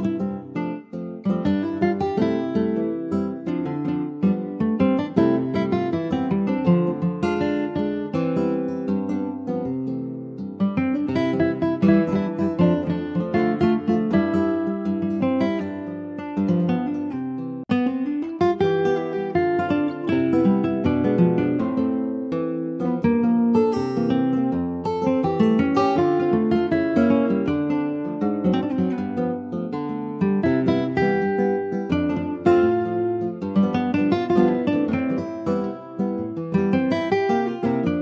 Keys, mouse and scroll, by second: 0.5-1.1 scroll down 2, 1.1 ctrl+s, 1.4-3.5 middle drag, 3.5 ctrl+s, 3.7-4.0 scroll down 2, 4.0-5.1 shift+middle drag, 5.1 ctrl+s, 5.4 middle click, 5.8 scroll up 2, 6.3 shift+middle click, 6.9 ctrl+s, 7.0 ctrl+click, 7.6-12.0 middle drag, 12.0 shift+scroll up 1, 12.2 middle click, 12.8 click, 13.4 Tab, 13.8 middle click, 14.8 Tab, 15.1 click, 15.5-15.8 scroll down 1, 15.8 ctrl+s, 15.9 click, 16.5-17.7 middle drag, 17.7 ctrl+s, 18.3 ctrl+a, 19.2 click, 19.7 click, 20.1-22.2 right drag, 22.2 ctrl+s, 22.3 click, 22.8 /, 23.0 click, 23.4 middle click, 23.6-23.9 scroll up 2, 23.9-26.9 shift+middle drag, 26.9 ctrl+s, 27.1-28.9 middle drag, 28.9 ctrl+scroll up 1, 29.0 ctrl+s, 29.2 click, 29.6 middle click, 30.1 ctrl+s, 30.4 middle click, 31.1 ctrl+s, 31.4 middle click, 32.1 scroll up 1, 32.2 Tab, 33.3 2, 33.5-34.9 drag, 34.9 ctrl+s, 35.1-35.5 scroll up 2, 35.5 middle click, 36.3 ctrl+s, 36.6 shift+middle click, 37.5 ctrl+s, 37.6 click.